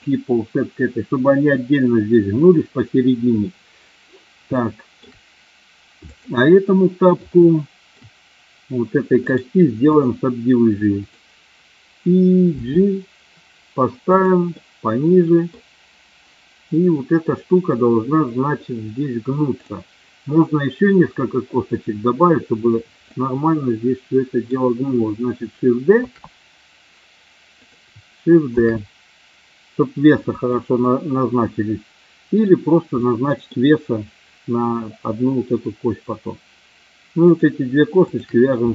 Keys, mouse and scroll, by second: 4.5 shift+middle click, 6.1 click, 7.4 shift+middle click, 9.2 right click, 11.0 click, 12.6 g, 14.6 middle click, 23.1-24.5 middle drag, 26.0 shift+d, 27.5 click, 28.6 shift+d, 30.4 click, 31.0-32.4 middle drag, 33.1 middle click, 37.2 shift+click, 38.0 shift+click.